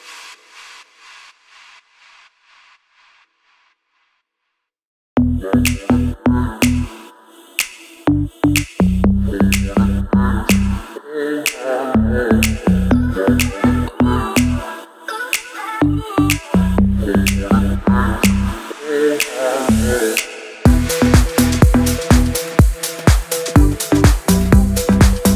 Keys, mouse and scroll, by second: 1.2-2.5 drag, 7.4 click, 13.0 click, 16.7-23.4 drag.